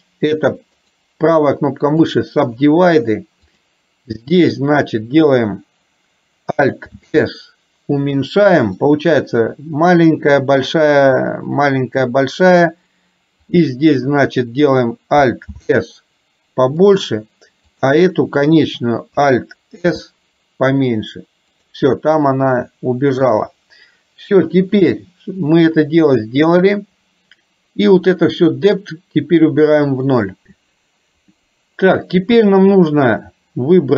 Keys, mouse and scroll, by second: 1.0-2.3 right drag, 3.6 click, 7.1 alt+s, 13.6 click, 15.6 alt+s, 17.8 click, 20.0 alt+s, 22.1-23.3 middle drag, 26.3 middle click, 28.8-30.1 drag.